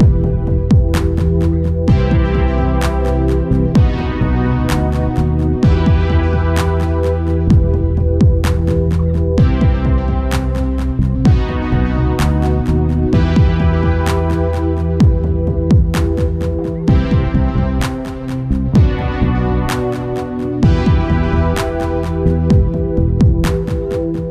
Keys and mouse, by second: 1.4-5.0 drag, 1.6 g, 5.3 Tab, 7.4-8.6 drag, 7.4 shift+d, 9.4-10.8 right drag, 10.8 click, 11.2-17.8 right drag, 19.1-24.3 right drag.